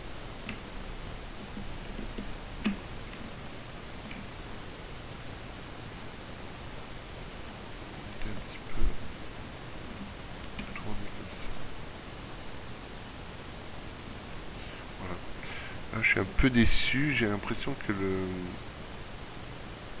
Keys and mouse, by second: 7.6 middle click, 10.6 r.